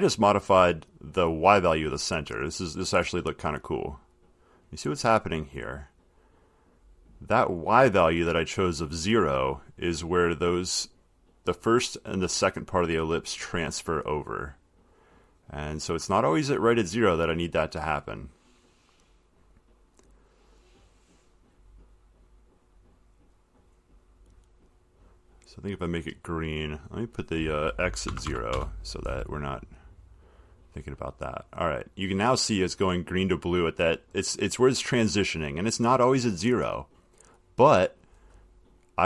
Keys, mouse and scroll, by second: 21.8 click, 23.8 click, 24.4 click, 25.0 click, 27.2 click, 28.3 BackSpace, 28.5 BackSpace, 30.2 click, 38.2 click.